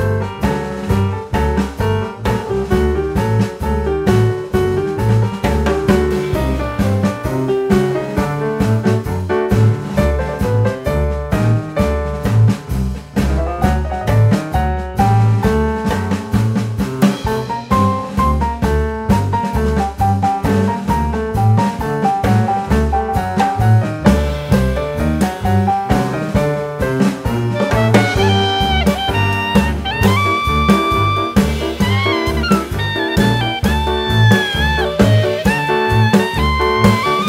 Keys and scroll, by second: 12.2 KP_1, 13.3 shift+a, 15.9 shift+a, 18.7 s, 21.0 g, 23.5 s, 30.5 s.